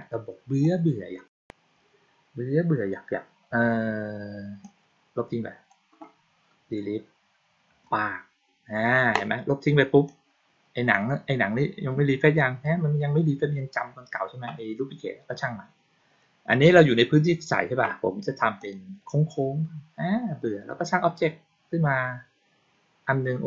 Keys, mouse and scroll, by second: 0.5-1.1 drag, 4.5-5.6 drag, 9.9-10.8 drag, 18.5 click.